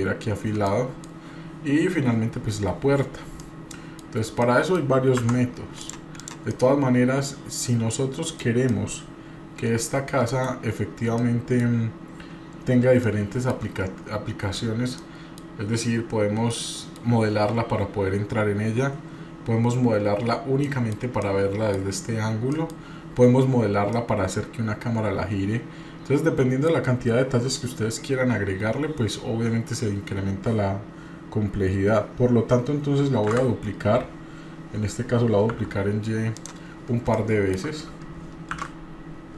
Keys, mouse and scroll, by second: 0.6 middle click, 1.0-1.4 scroll down 1, 3.4 middle click, 4.1 scroll down 2, 4.4 middle click, 5.2 Tab, 5.8 click, 6.2 drag, 6.5-8.4 middle drag, 8.7 middle click, 10.8-11.2 scroll down 2, 11.2 middle click, 11.9-12.9 scroll down 1, 13.0-13.5 shift+middle drag, 15.0 middle click, 15.7-16.0 scroll up 2, 16.5 middle click, 19.7-20.6 scroll down 2, 20.6 middle click, 21.2 middle click, 22.0 scroll up 1, 22.5 middle click, 24.0-26.7 middle drag, 29.6-30.1 scroll up 2, 33.3 shift+d, 37.1 shift+middle click, 38.5 shift+d.